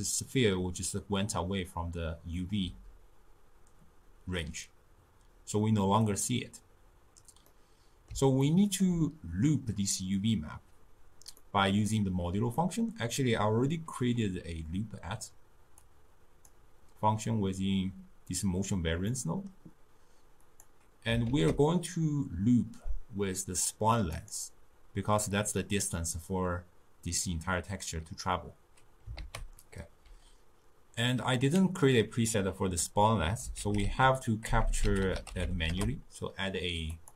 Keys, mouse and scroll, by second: 7.5 scroll up 2, 7.5-15.8 middle drag, 15.8-18.9 drag, 19.1-20.5 middle drag, 20.5 click, 21.3 ctrl+a, 29.2 ctrl+a, 34.7 BackSpace, 34.8 BackSpace.